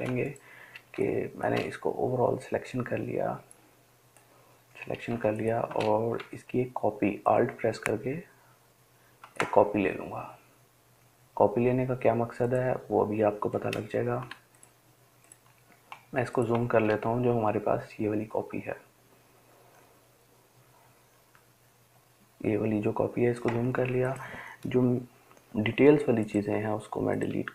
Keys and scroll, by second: 14.5 ctrl+space, 15.0 ctrl+space, 25.6 Delete, 26.8 Delete.